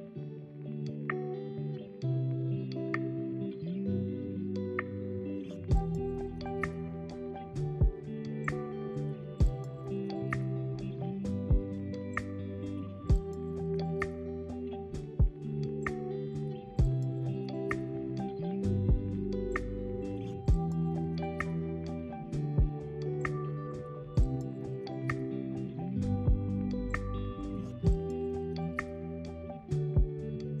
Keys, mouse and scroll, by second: 5.3 click, 5.7-6.3 scroll down 2, 6.4-7.6 middle drag, 7.6-10.6 scroll up 1, 13.1 click, 15.5 g, 17.6-19.1 middle drag, 19.1 shift+click, 19.8-21.2 middle drag, 21.2 ctrl+p, 24.5 click, 25.2 g, 26.7 s, 29.7-30.6 middle drag.